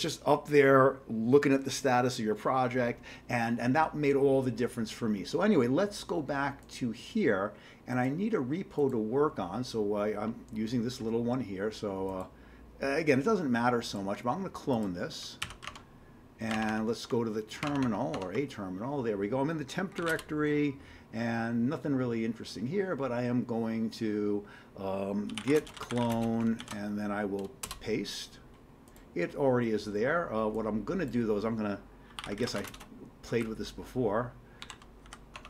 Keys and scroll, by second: 15.5 ctrl+c, 15.6 alt+Tab, 16.5 alt+Tab, 16.7 alt+Tab, 17.7 alt+Tab, 19.7-20.5 typing, 25.1-26.6 typing, 27.7 Return, 32.0-33.0 typing, 34.4-35.1 typing, 35.3 Tab.